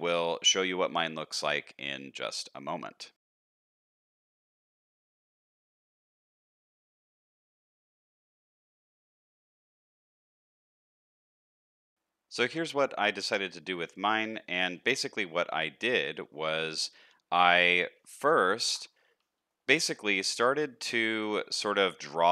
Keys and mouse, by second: 3.1 shift+middle click, 3.1 a, 3.1 x, 3.4-4.4 drag, 5.7 middle click, 6.0 middle click, 7.0 middle click, 7.3 shift+middle click, 8.0 shift+middle click, 8.4 ctrl+z, 8.4 shift+middle click, 8.5 middle click, 9.3 middle click, 9.6 ctrl+z, 9.6 middle click, 9.7 a, 9.8 h, 9.8 middle click, 10.1 click, 10.5 middle click, 10.7 alt+h, 10.8 Tab, 10.9 middle click, 10.9 alt+a, 11.1 middle click, 11.3 middle click, 11.5 shift+middle click, 14.6 shift+middle click, 16.4 middle click, 17.7 shift+middle click, 18.6 ctrl+s, 18.9 middle click, 19.4 shift+middle click, 20.8 Tab, 21.1 middle click, 21.7 shift+middle click.